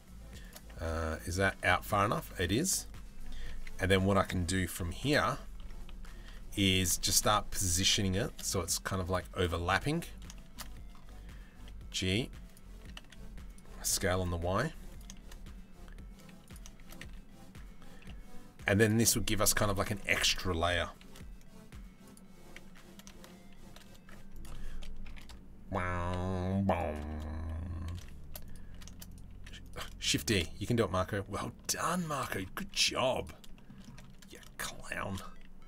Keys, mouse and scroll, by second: 0.4 Tab, 1.1 Tab, 1.3 middle click, 3.2 s, 4.4 KP_3, 4.7 KP_1, 5.2 KP_3, 6.7 shift+middle click, 7.9 shift+d, 11.2 g, 12.4 s, 13.4 s, 14.8 shift+d, 16.4 shift+d, 20.6 shift+d, 23.2 shift+d, 24.2 r, 25.6 g, 27.5 d, 28.3 d, 29.5 d, 32.2 z, 33.1 shift+middle click, 33.4 middle click, 34.6 shift+d.